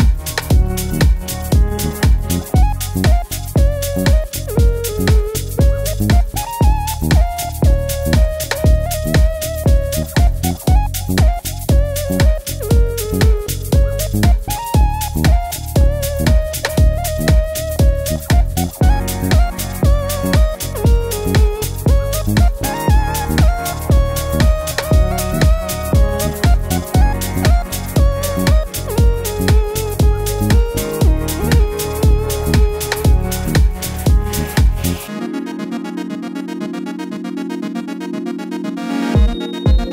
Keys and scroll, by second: 0.6 Right, 0.7 Right, 0.8 Right, 0.8 Right, 17.7 super+z, 25.5 BackSpace, 30.0 Up, 30.1 Up, 30.3 Down, 30.4 Down, 31.9 Down, 32.0 Down, 32.4 Down, 32.4 Up, 32.5 Up.